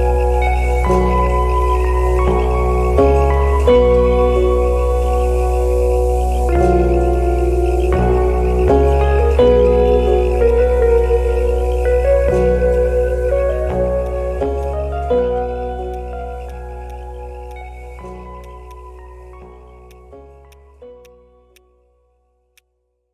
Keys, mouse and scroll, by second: 7.1 alt+click, 7.4 alt+scroll up 2, 7.7 alt+middle click, 8.1 alt+scroll up 1, 8.6 alt+right click, 9.8 shift+click, 10.3 right click, 11.5 scroll down 1, 12.5 scroll up 1, 13.3 alt+middle click, 15.1-15.8 scroll up 1, 17.1-17.7 scroll down 1, 18.8-19.2 scroll up 1, 19.5 alt+middle click, 22.7-23.1 scroll up 1.